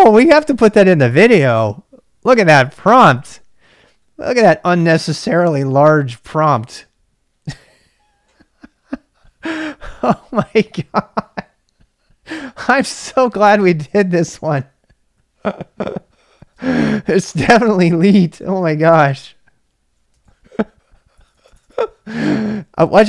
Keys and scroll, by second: 16.2-17.3 typing, 19.8-23.0 typing.